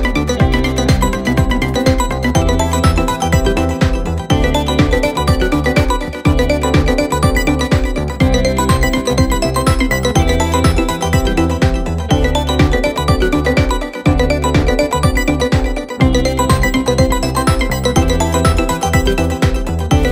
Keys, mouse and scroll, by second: 4.7 click, 5.1 middle click, 5.9 scroll down 5, 6.1 scroll up 1, 6.1-6.8 scroll down 1, 6.8-8.3 drag, 9.3 click, 10.0-10.6 middle drag, 10.6 click, 10.9-11.9 scroll up 19, 11.9 click, 12.1 click, 12.3-13.1 scroll down 8, 13.1-14.3 drag, 14.3-15.0 scroll up 8, 15.0 click, 15.2-16.1 scroll down 11, 16.2-17.5 drag, 17.5-17.9 scroll up 10, 17.9 scroll down 1, 18.0 scroll up 1, 18.0-19.2 middle drag, 19.2 click, 19.5 click, 19.7-20.1 right drag.